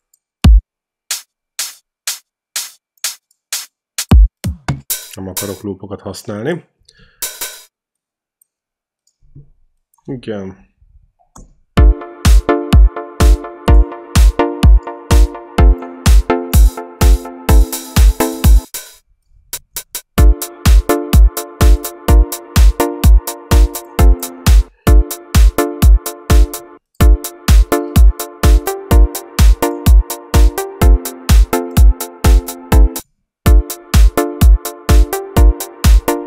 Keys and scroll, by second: 7.0 q, 10.8 ctrl+shift+Right, 11.6 space, 18.5 space, 18.6 q, 20.0 space, 24.5 space, 26.6 space, 32.8 space.